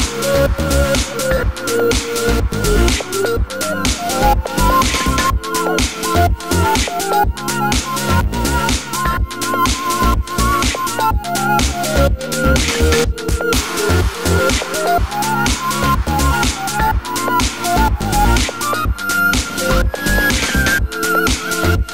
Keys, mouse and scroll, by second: 1.0 shift+a, 3.6 scroll down 1, 7.4 e, 16.6 x.